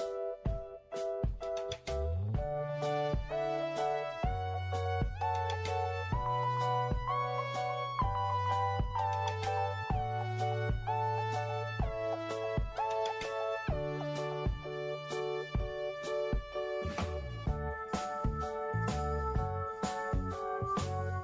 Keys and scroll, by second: 0.0 ctrl+g, 20.1 ctrl+y.